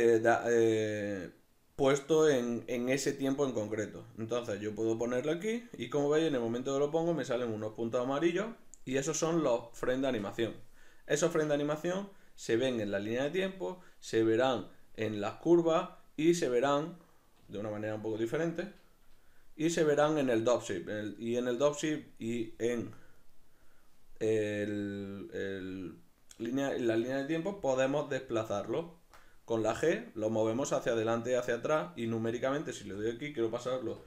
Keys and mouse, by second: 17.0 right click, 23.2 right click, 27.5 g, 31.8 right click, 32.8 g.